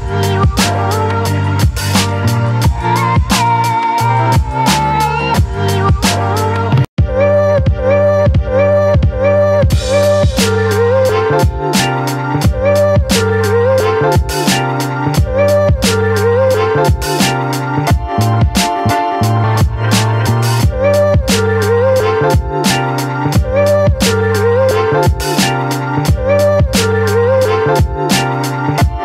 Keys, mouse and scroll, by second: 0.2 ctrl+z, 2.6-5.6 drag, 5.6 space, 6.1 ctrl+click, 6.9-8.9 ctrl+drag, 9.7 Up, 10.8 click, 20.4 click, 24.5 ctrl+t, 25.9 click, 26.6 Down, 28.5 space, 28.8-29.0 alt+drag.